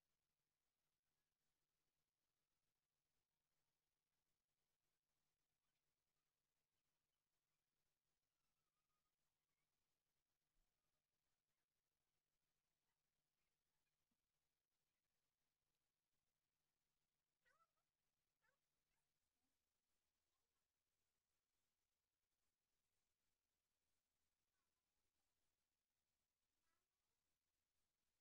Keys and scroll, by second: 24.2 ctrl+c, 24.8 ctrl+v.